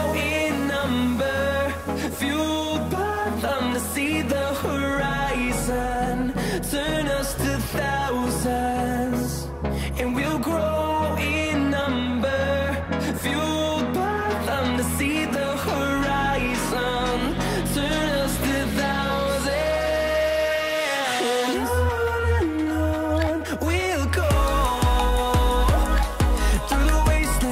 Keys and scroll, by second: 15.5 typing.